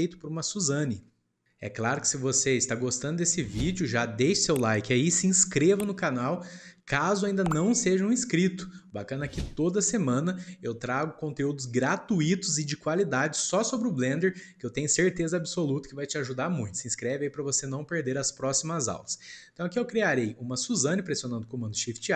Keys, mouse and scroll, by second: 0.8-4.7 shift+middle drag, 8.1-9.5 middle drag, 9.5-10.1 ctrl+scroll up 1, 10.1-13.9 shift+middle drag, 20.1-21.8 shift+middle drag, 21.8 shift+a.